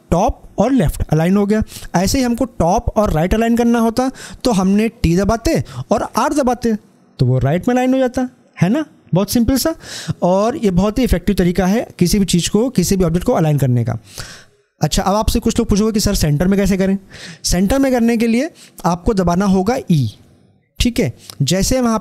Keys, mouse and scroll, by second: 4.9 l, 7.8-8.5 typing.